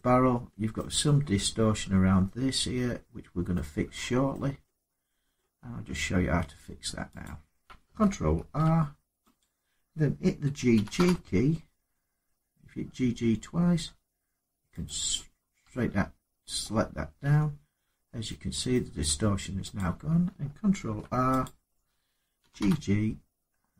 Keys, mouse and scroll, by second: 0.5 middle click, 1.9 scroll down 4, 2.1-3.3 scroll, 3.8 scroll down 4, 4.1 middle click, 5.1 middle click, 5.1 scroll up 4, 5.4 scroll down 2, 6.0 Tab, 7.0 click, 8.1 ctrl+r, 9.2 click, 10.5 typing, 14.6 click, 16.4 middle click, 16.5 middle click, 17.0 Tab, 17.5-18.0 scroll down 3, 18.2 scroll up 2, 18.5 middle click, 18.8 Tab, 19.5 click, 20.5 ctrl+r, 21.2 click, 22.2 typing.